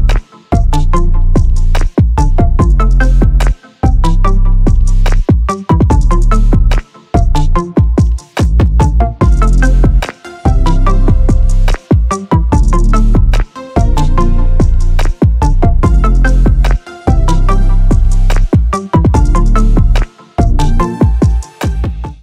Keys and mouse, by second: 5.5 click, 14.4 space, 16.5 space.